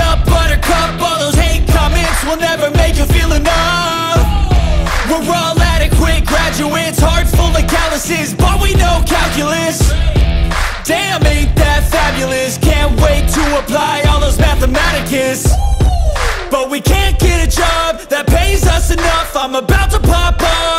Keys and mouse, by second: 11.1 click, 13.4 click.